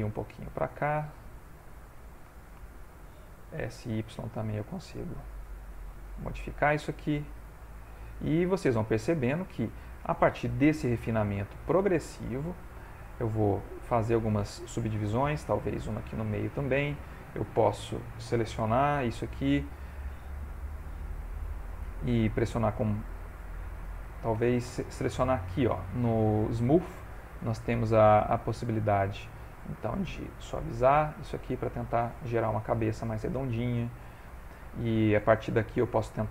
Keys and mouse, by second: 0.8 middle click, 2.7 shift+click, 3.5 s, 5.8 middle click, 7.7 shift+middle click, 8.5 middle click, 9.0 ctrl+middle click, 9.4 shift+middle click, 11.0 ctrl+r, 12.4 ctrl+middle click, 12.8 shift+middle click, 13.2 middle click, 13.8 middle click, 15.3 ctrl+r, 17.1 middle click, 17.6 alt+click, 18.6 3, 18.9 alt+click, 19.3 alt+shift+click, 19.6 middle click, 22.2 right click, 30.1 click, 32.6 middle click, 34.1 ctrl+middle click, 34.6 middle click, 35.3 middle click.